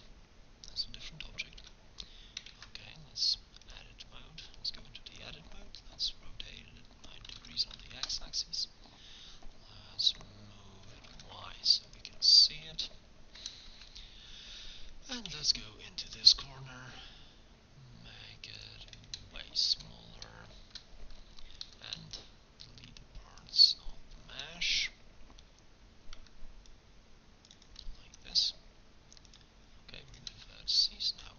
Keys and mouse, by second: 1.7 Tab, 2.6 ctrl+Tab, 7.3 r, 8.9-10.9 drag, 11.1 g, 12.7 KP_1, 15.3 g, 16.4 s, 21.7 a, 22.0 b, 25.5 c, 27.7-28.9 drag, 28.1 x.